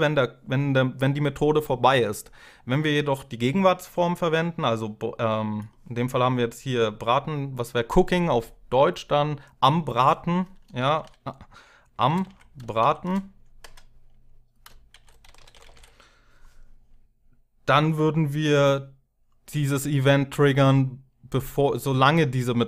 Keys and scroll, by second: 11.5-13.4 typing, 14.4-16.0 typing.